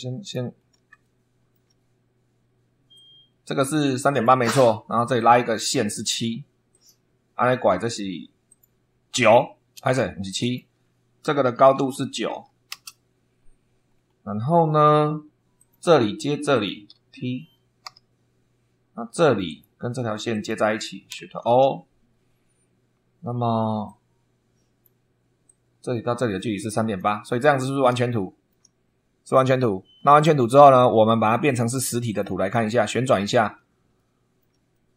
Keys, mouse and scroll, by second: 0.5 scroll down 1, 0.9 shift+middle click, 2.8-4.4 drag, 5.1 click, 6.6 click, 8.4 click, 9.7 Escape, 10.3 click, 11.7 shift+v, 12.2 shift+9, 12.6 Return, 13.8-14.2 scroll down 2, 15.5 click, 16.4 click, 17.8 t, 19.4 click, 20.2 click, 21.3 shift+o, 23.8-24.9 drag, 25.4-27.1 drag, 27.2 click, 28.1 shift+click, 28.3 shift+middle click, 31.4 click, 32.0 click, 32.6 middle click, 33.9 shift+middle click, 34.6 shift+middle click.